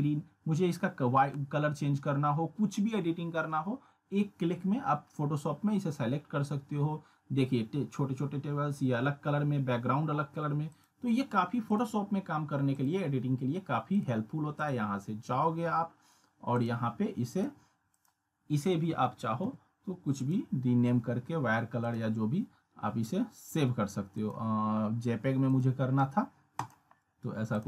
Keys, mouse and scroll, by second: 10.7 click, 20.2 click, 24.2 click.